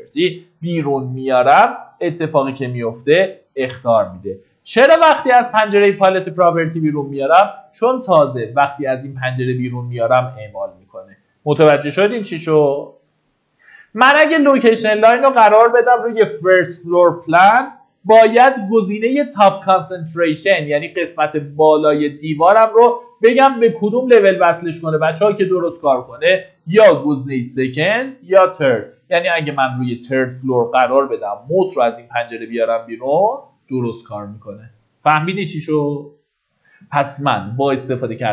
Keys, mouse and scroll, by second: 1.1-30.5 drag.